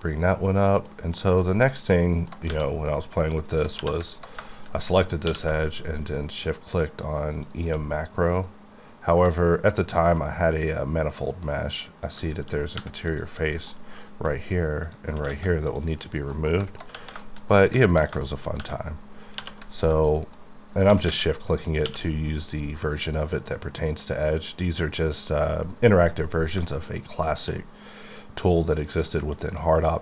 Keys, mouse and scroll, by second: 1.1 middle click, 1.6 alt+middle click, 2.6-3.1 scroll up 3, 3.5 alt+click, 3.8 2, 4.1 alt+click, 4.4 alt+shift+middle click, 5.3 shift+q, 7.5 shift+click, 12.1 click, 13.0 3, 13.1 click, 13.9 middle click, 14.8 shift+click, 15.3 x, 15.7 click, 16.0 scroll down 1, 16.3 middle click, 17.2 shift+middle click, 18.9-19.4 scroll up 2, 19.4 2, 19.7 alt+click, 20.4-20.8 scroll up 1, 20.8 g, 21.1 z, 21.7 click, 21.8 q, 26.9 shift+Num_Lock, 27.3 shift+click.